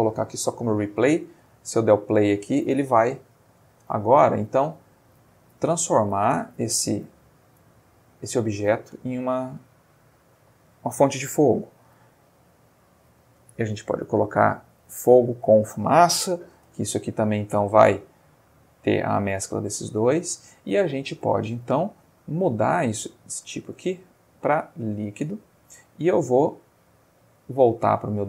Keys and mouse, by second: 0.1 click, 1.3 space, 10.0 Escape, 11.1 click, 13.1 click, 13.8 click, 16.5 space, 19.9 Escape, 23.5 click, 24.8 click, 26.5 click.